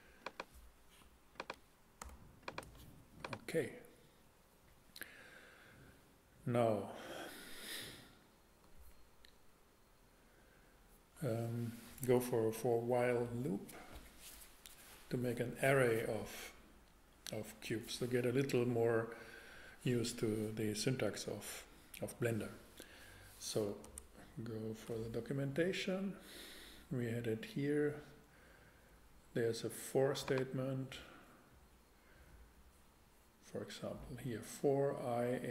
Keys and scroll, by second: 2.0 super+x, 2.6 x, 23.8 super+Tab.